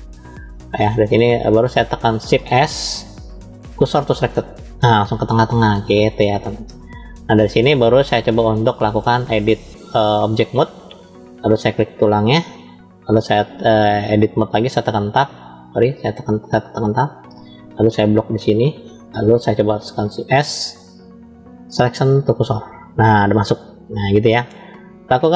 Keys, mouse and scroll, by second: 2.6 shift+s, 5.4-8.5 middle drag, 9.1-11.9 drag, 14.5 Tab, 15.8 Tab, 18.1 click, 19.9 shift+s, 24.1-25.3 middle drag.